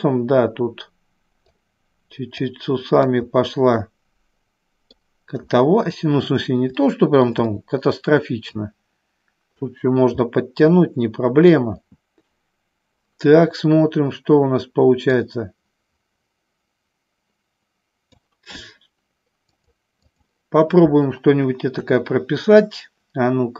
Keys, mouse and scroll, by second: 2.7 click, 3.9-5.0 middle drag, 6.9 shift+middle click, 7.5 middle click, 8.5-10.0 drag, 10.4-11.7 middle drag, 15.4-18.4 drag, 19.8 click, 21.9 KP_1.